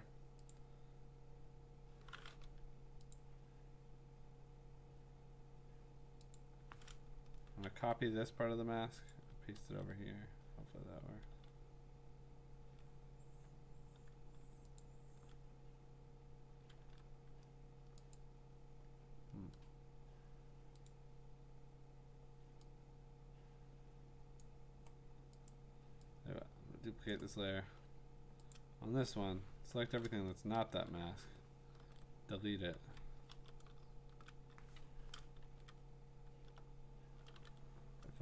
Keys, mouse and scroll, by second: 0.5 click, 3.1 click, 6.4 click, 7.6 ctrl+c, 9.1 click, 9.6 ctrl+v, 11.3 ctrl+z, 14.9-17.4 ctrl+drag, 16.8 ctrl+z, 18.2 click, 20.6 click, 20.9 click, 24.4 click, 25.5 click, 27.1 click, 27.5-28.1 scroll, 28.5 click, 29.8 ctrl+shift+i, 30.7 BackSpace, 31.8 ctrl+d, 32.9 ctrl+z, 33.9 BackSpace, 34.8 Escape, 35.4 ctrl+z, 36.3 alt+BackSpace, 37.3 ctrl+d.